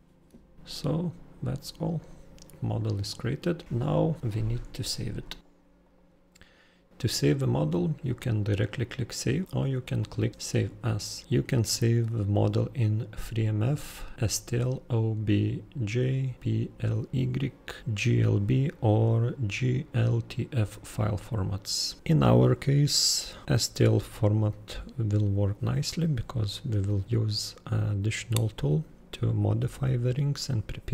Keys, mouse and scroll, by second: 0.7 super+click, 2.0 super+click, 2.8 super+click, 4.5 super+click, 5.8 super+click.